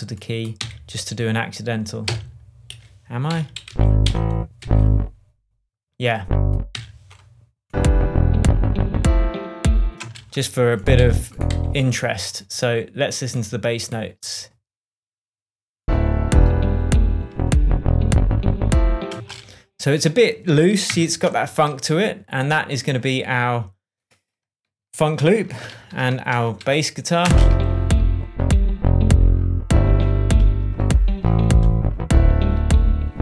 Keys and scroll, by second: 0.5 Right, 2.0 Down, 2.6 Up, 3.2 p, 3.6 Down, 4.0 Up, 4.5 Down, 6.7 Right, 9.9 space, 10.9 Right, 19.1 space, 20.8 super+d, 25.7 super+j, 26.2 shift+super+j, 26.3 shift+super+Tab, 26.9 shift+Tab, 27.2 shift+space.